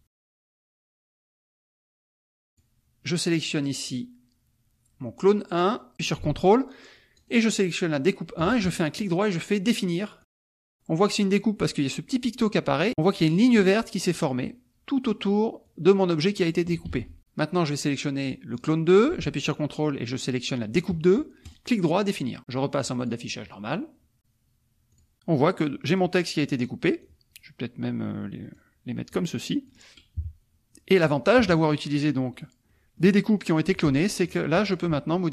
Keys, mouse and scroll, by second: 0.6 right click, 1.0 click, 2.5 click, 5.2 click, 7.1 ctrl+click, 10.2 click, 12.8 click, 15.6-16.7 drag, 16.9 ctrl+z, 18.6 click, 20.7-21.7 ctrl+drag, 23.0 click, 25.0 click, 25.8 click, 27.1-28.7 drag, 29.1-30.1 drag, 30.2 KP_Subtract, 30.7 click, 31.4 KP_Subtract, 31.9 click, 32.3 middle click, 32.4 click, 32.7 click, 33.7 click, 34.2 click, 34.6 shift+click, 35.1 shift+click.